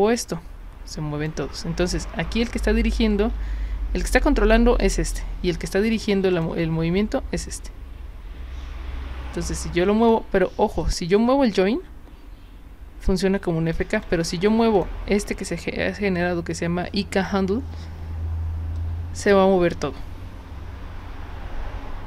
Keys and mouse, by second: 3.1 ctrl+z, 4.2 click, 4.8 click, 5.9 drag, 6.3 click, 7.0-10.1 drag, 10.8-13.7 drag, 13.9 click, 14.7 click, 18.8-22.0 drag.